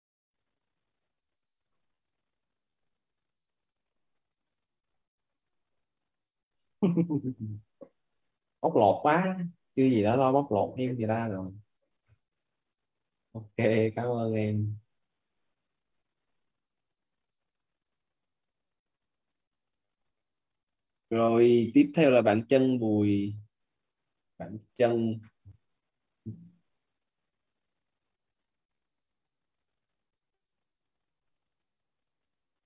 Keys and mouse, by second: 2.7-4.7 typing, 6.2-8.8 typing, 10.7 Down, 13.2 click.